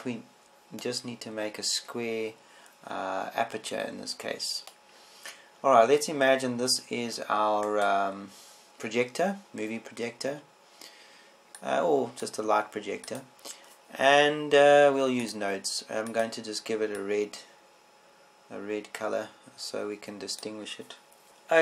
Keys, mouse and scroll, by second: 2.6-6.2 drag, 9.4-12.8 right drag, 13.3 click, 21.3-21.6 drag.